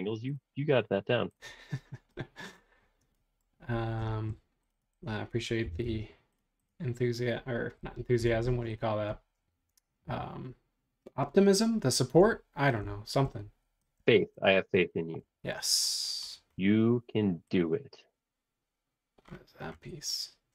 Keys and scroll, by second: 5.6 b, 7.8 Escape, 8.2 Escape, 8.4 space.